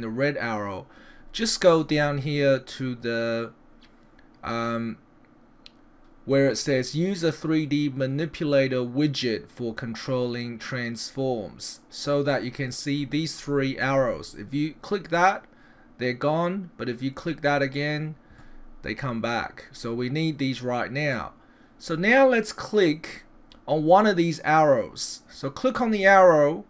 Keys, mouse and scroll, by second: 15.0 click, 17.2 click, 21.1 middle click, 26.0 click.